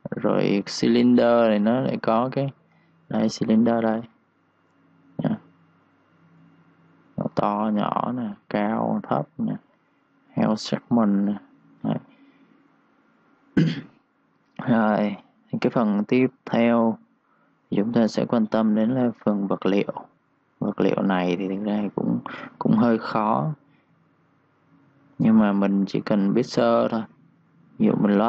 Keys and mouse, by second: 2.8 s, 3.5 click, 3.8 1, 3.8 click, 10.3 click, 16.2 ctrl+shift+Num_Lock, 16.4 ctrl+shift+d, 21.7 Escape, 23.0 click.